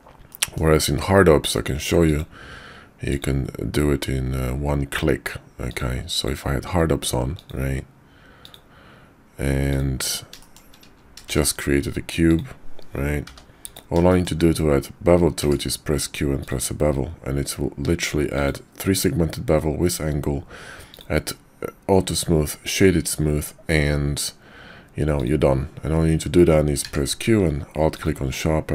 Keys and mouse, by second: 0.3 middle click, 2.0-3.3 drag, 9.7 click, 10.4 shift+drag, 11.2 shift+a, 13.2 g, 14.1 shift+click, 15.4 q, 20.9 click, 26.8 q.